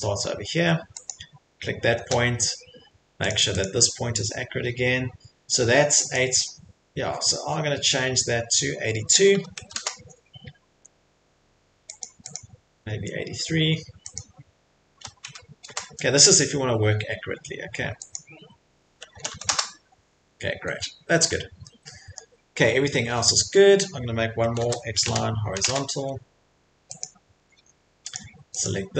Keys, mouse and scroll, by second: 1.1 click, 2.3 Escape, 3.3 click, 3.6 click, 6.2 click, 9.1-10.1 typing, 10.7 Escape, 12.0 click, 12.4 click, 14.1 click, 15.0-15.6 typing, 15.6 Return, 16.7 typing, 18.1 click, 19.1-19.8 typing, 20.4 Return, 20.5 middle click, 20.8 middle click, 21.0 Escape, 21.2 Escape, 21.2 middle click, 21.2 middle click, 22.2 middle click, 23.2 middle click, 23.3 middle click, 23.9 middle click, 23.9-26.4 typing, 24.0 middle click, 27.0 click, 27.4 Escape, 27.6 Escape, 28.1 click, 28.6 click.